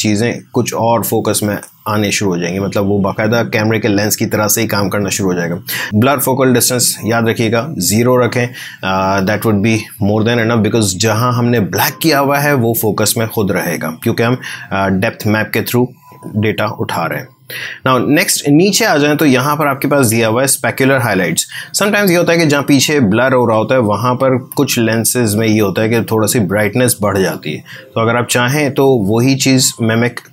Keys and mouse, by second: 25.4-30.3 drag.